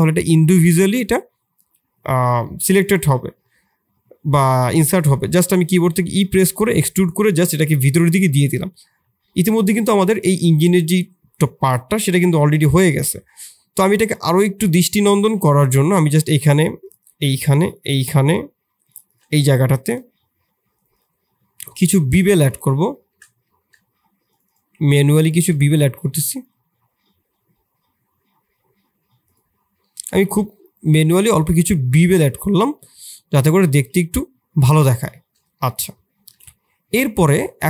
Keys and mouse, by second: 2.4 middle click, 3.4 middle click, 5.2 e, 7.5-8.6 middle drag, 8.8 Tab, 9.2 middle click, 11.9 middle drag, 12.6 middle click, 13.1 Tab, 13.7 3, 14.3 click, 15.1 2, 17.0-18.2 shift+drag, 18.8 shift+click, 19.4 middle click, 20.7 shift+click, 20.9 shift+click, 21.8 shift+click, 23.0 shift+middle click, 23.4 middle click, 24.4 shift+click, 25.0 shift+click, 29.8 middle click, 30.2 Tab, 31.1-32.2 middle drag, 32.7-33.4 middle drag, 34.6 middle drag, 35.5-36.0 shift+middle drag.